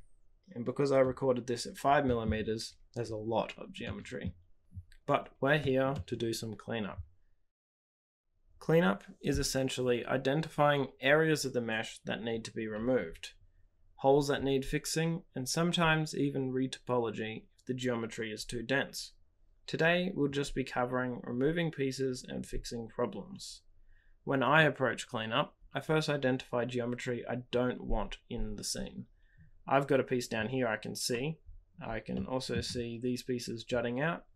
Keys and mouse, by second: 3.9 click, 3.9 middle click, 5.9-7.5 shift+middle drag, 32.2 middle click.